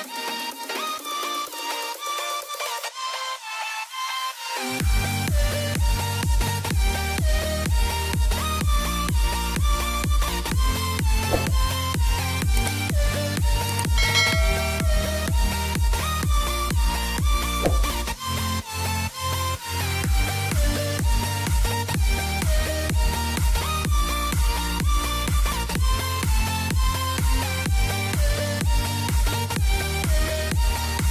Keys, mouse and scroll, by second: 2.4 right click, 3.0 click, 4.5 click, 5.6 click, 7.0 z, 7.5 click, 8.4 click, 10.0 click, 11.1 click, 12.7 click, 13.6 typing, 14.3 click, 15.6 Delete, 17.6 click, 18.2 Delete, 19.3 click, 21.2 ctrl+right click, 21.6 click, 23.9 ctrl+right click, 24.5 click, 27.6 typing, 28.3 click, 29.2 middle click.